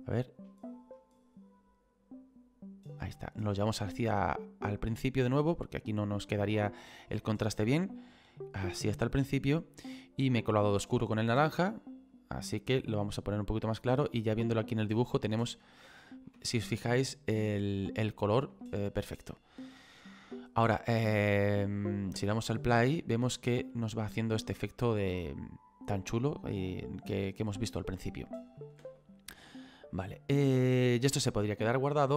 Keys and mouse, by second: 10.8 click, 15.1 middle click, 16.1 shift+middle click, 17.8 middle click, 18.7 shift+middle click, 22.2 space, 23.7 middle click, 28.8 space.